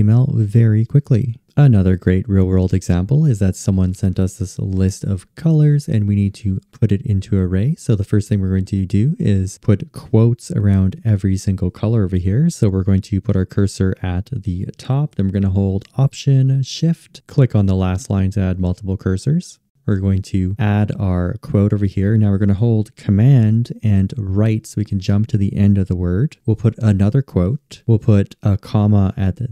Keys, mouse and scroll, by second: 17.2-20.1 alt+shift+drag, 22.4 super+Right.